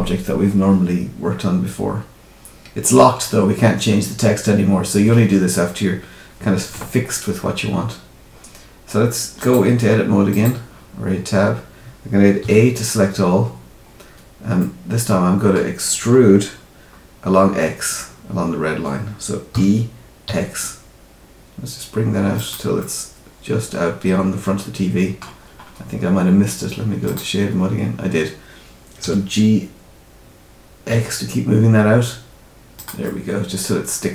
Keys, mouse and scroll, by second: 9.3 click, 11.1-12.4 scroll up 1, 12.4 a, 13.2-14.1 scroll down 8, 14.5 middle click, 15.9-16.4 scroll up 2, 16.4-16.7 scroll down 2, 19.5 e, 22.7 middle click, 25.4-25.7 scroll up 2, 27.0 click, 27.5 scroll up 1, 29.0 g, 33.0 middle click.